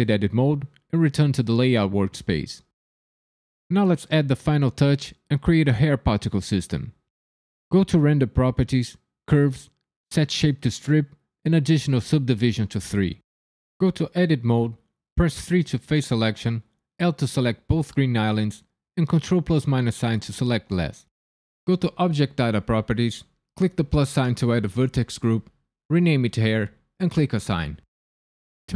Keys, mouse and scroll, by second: 5.3 KP_1, 7.7 click, 9.2 click, 10.8 click, 11.6 click, 14.1 Tab, 15.3 click, 16.4 l, 17.7 l, 19.0 ctrl+KP_Subtract, 22.0 click, 23.5 click, 24.4 click, 24.5 click, 27.4 click.